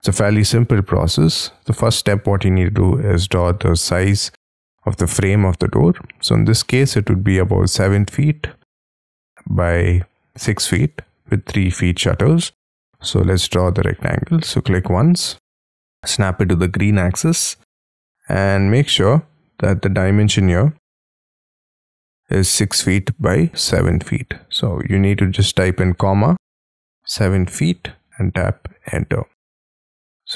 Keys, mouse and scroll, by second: 0.5-0.9 scroll up 2, 0.9 scroll down 4, 6.6 middle click, 8.4 t, 10.8 space, 12.3 middle click, 13.0 r, 15.8 Right, 16.0 Left, 26.1 ,, 27.2 7, 27.7 ', 28.9 Return, 29.6 space.